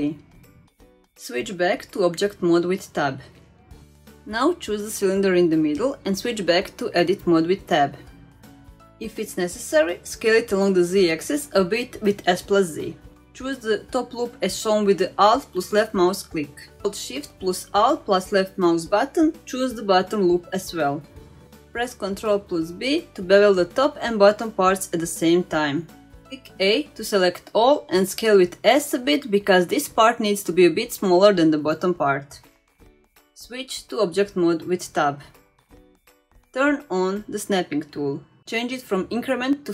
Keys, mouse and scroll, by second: 1.8 scroll down 1, 2.2 shift+middle click, 2.6 scroll up 1, 2.8 Tab, 3.3 click, 4.3 Tab, 10.0 s, 14.5 2, 15.5 alt+click, 18.6 alt+shift+click, 20.6 ctrl+b, 27.2 a, 27.8 s, 34.5 Tab, 36.5 click, 38.6-39.7 drag.